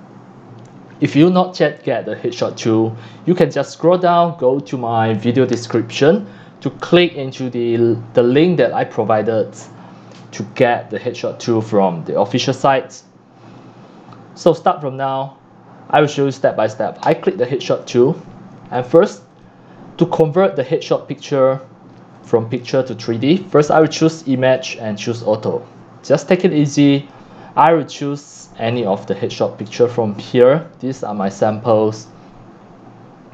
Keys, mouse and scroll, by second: 14.7-18.1 drag, 18.7 drag, 19.3 click, 20.3 click, 21.0 click, 21.3-22.1 drag, 23.7 click, 24.3 click, 25.1 click, 25.9 click, 27.1 click, 27.6 click, 27.8 click, 28.1 click, 28.3-29.6 scroll down 1, 29.7 click, 29.9 click, 31.9 click, 32.1 scroll, 32.7 scroll, 32.9 scroll down 1, 33.0 scroll.